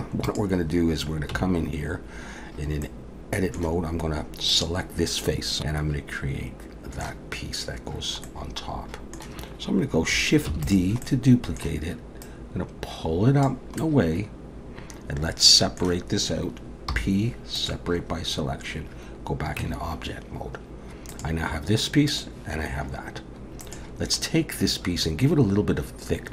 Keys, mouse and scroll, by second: 0.3 click, 1.3 Tab, 2.8 middle click, 4.5 click, 5.6 middle click, 8.3 middle click, 10.5 shift+d, 11.1 middle click, 12.2 click, 13.8 middle click, 16.9 p, 19.6 Tab, 21.1 click, 22.1 click, 23.6 click, 24.2 middle click.